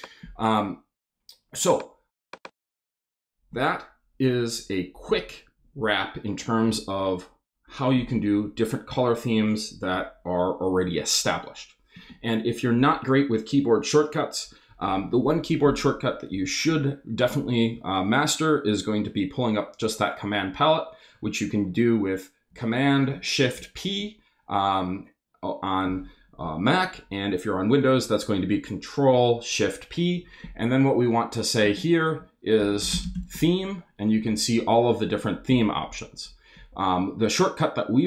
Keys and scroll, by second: 23.5 shift+super+p, 31.6-33.4 typing, 36.7 Down.